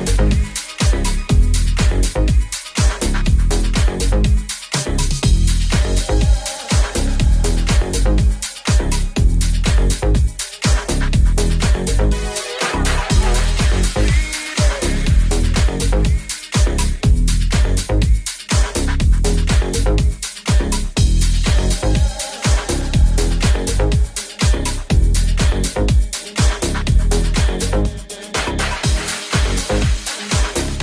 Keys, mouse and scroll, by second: 0.3 g, 1.6-10.6 middle drag, 2.0 ctrl+scroll down 1, 2.6 right click, 3.0 g, 3.6 right click, 4.2 r, 7.1 g, 9.6 g, 10.6 right click, 10.6-28.2 middle drag, 11.7 KP_3, 13.0 g, 14.1 KP_1, 14.9 g, 18.2 r, 18.2 g, 21.0 ctrl+Tab, 24.3 f, 27.7-30.8 drag.